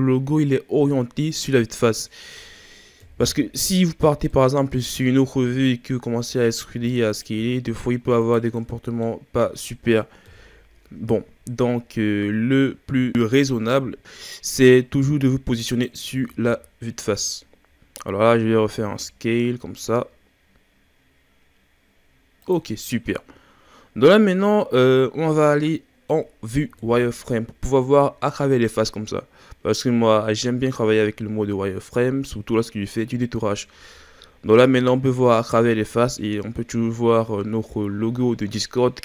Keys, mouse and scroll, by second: 3.0 KP_1, 4.3-6.8 middle drag, 6.8 e, 8.6-10.2 middle drag, 10.2 KP_1, 11.8-13.1 scroll up 4, 13.1 s, 16.1 ctrl+z, 16.4 ctrl+z, 18.9 s, 23.3-23.9 scroll up 3, 23.9-25.3 scroll down 1, 25.3-26.8 middle drag, 26.8 KP_1, 28.3-28.6 scroll up 3, 29.1-30.8 scroll down 2, 30.8 z, 32.1-32.4 scroll up 1, 34.1-34.7 scroll down 2, 34.7-35.5 scroll up 2, 36.9-37.2 scroll down 4.